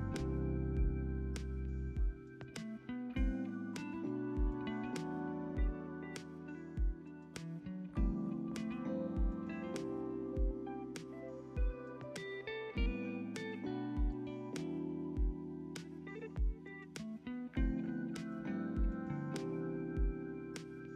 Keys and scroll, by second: 6.0 =, 9.0 space, 14.6 space, 19.7 =.